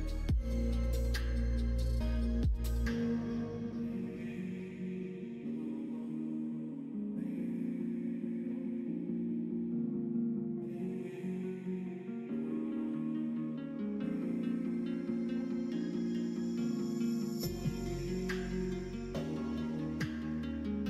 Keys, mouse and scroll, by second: 3.1-4.7 drag, 4.7 scroll up 1, 4.8 middle click, 5.5 scroll down 1, 6.7 click, 7.8 ctrl+z, 8.8-12.2 drag, 13.3 l, 14.4 l, 14.7 middle click, 16.8 s, 18.5 middle click, 19.4 click, 20.4 l.